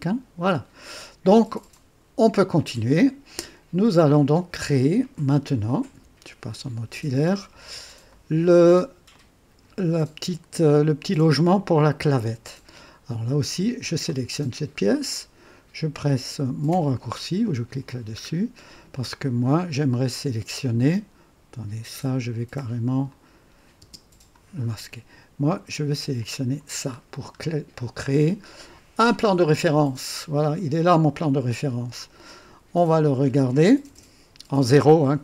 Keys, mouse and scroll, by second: 1.7-2.5 right drag, 2.6-4.5 drag, 5.0 click, 5.9 &, 7.6-7.9 scroll up 2, 8.1 right click, 9.1-9.8 drag, 12.0-13.1 drag, 13.9 click, 16.7 &, 18.3-18.6 scroll up 1, 18.6 typing, 18.9-20.9 drag, 20.5 typing, 23.1 click, 23.8 typing, 24.6 scroll up 1, 26.2 click, 26.6 typing, 27.0-29.4 scroll down 2, 29.4 click, 30.4-30.7 scroll down 2, 32.0-33.2 drag, 33.9 KP_0, 35.1-35.2 right drag.